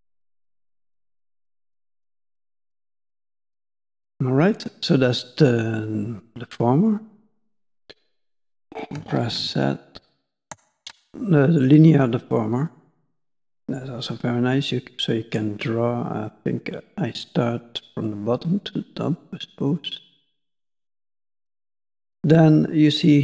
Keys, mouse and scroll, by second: 3.1 click, 8.1 click, 9.3 ctrl+z, 9.9 ctrl+z, 13.1 click.